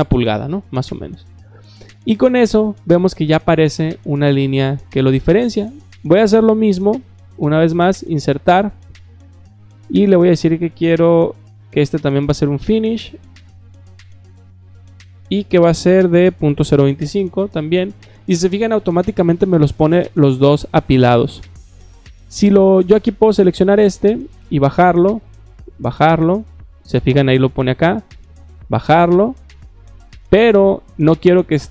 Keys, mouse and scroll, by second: 7.1 click, 8.9 click, 9.6 click, 12.8 click, 13.9 click, 14.8 click, 23.4 click, 24.5 click, 25.7 click, 28.4 click.